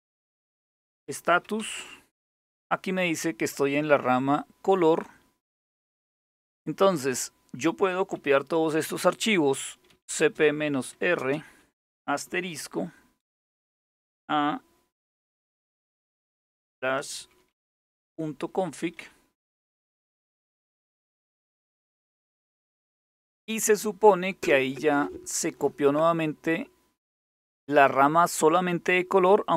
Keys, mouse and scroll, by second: 0.0-1.7 typing, 4.0-5.7 drag, 9.3-11.1 typing, 12.2-12.8 typing, 15.9-20.4 typing, 22.1 Return.